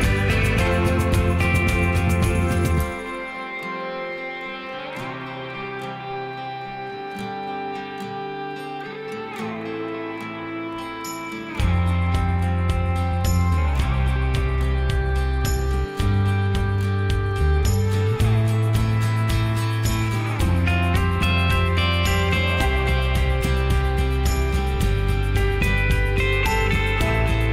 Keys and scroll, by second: 10.0 Escape, 24.3 m.